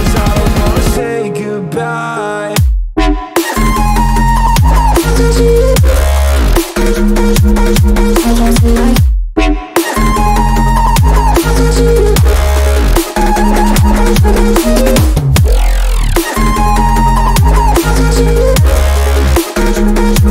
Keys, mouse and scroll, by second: 0.0-1.6 middle drag, 1.6-9.2 drag, 10.6-14.3 drag, 16.3-20.3 drag.